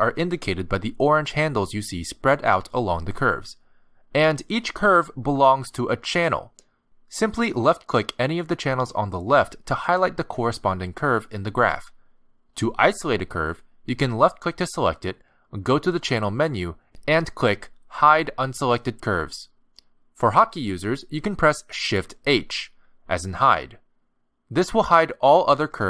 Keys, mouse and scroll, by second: 8.4 click, 9.4 click, 10.5 click, 11.4 click, 12.5 click, 13.7 click, 17.7 click, 22.1 ctrl+z, 23.4 shift+h, 25.3 click.